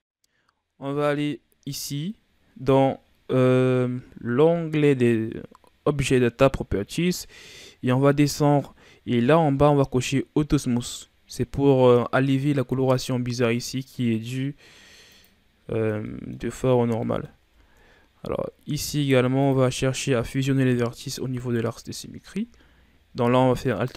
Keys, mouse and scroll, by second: 7.6-8.2 scroll down 1, 8.2-10.9 scroll down 6, 10.9-11.2 scroll down 1, 11.8-12.5 middle drag, 12.5-15.0 scroll up 2, 15.0 click, 15.8 scroll down 1, 16.0-16.5 middle drag, 16.5-17.0 scroll up 3, 17.0 middle click, 17.4 Tab, 17.8-18.8 ctrl+scroll up 7, 18.8 ctrl+Tab, 21.4 alt+right click, 22.0-23.7 scroll down 1, 23.7 alt+right click.